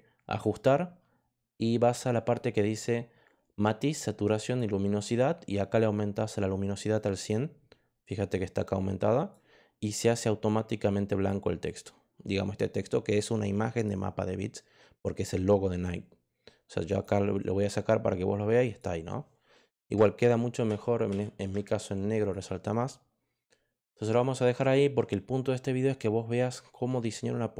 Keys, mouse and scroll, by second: 4.4 click, 6.9 click, 8.3 click, 10.8 click, 11.6 click, 16.8 click, 18.6 click, 20.1 ctrl+z, 20.6 ctrl+z, 21.0 ctrl+z, 22.1 click.